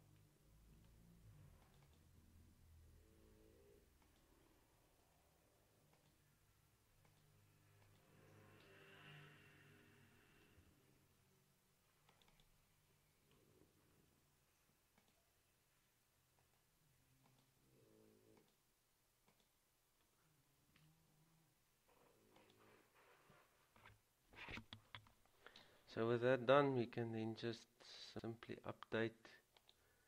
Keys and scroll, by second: 0.9 ctrl+c, 3.6 Escape, 9.6 ctrl+v, 10.8 Return, 14.1 ctrl+c, 20.9 ctrl+v.